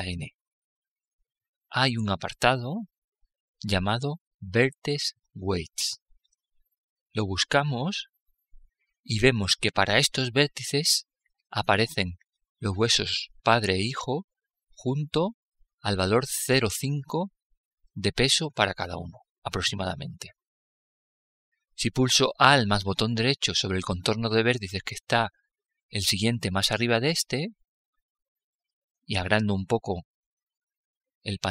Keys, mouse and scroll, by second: 0.1-2.1 drag, 12.5-15.3 drag, 20.2-22.9 middle drag, 26.7-28.5 right drag, 29.3-31.1 drag.